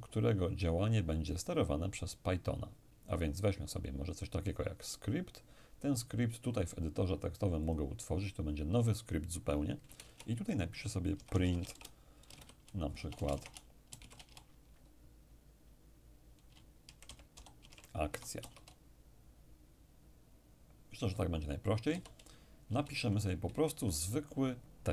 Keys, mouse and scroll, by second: 3.1 click, 7.6 click, 9.8 Return, 10.0 Return, 11.1-14.0 typing, 16.8-18.4 typing, 21.9 Home, 22.7 Return, 23.0 Up, 23.5 Down.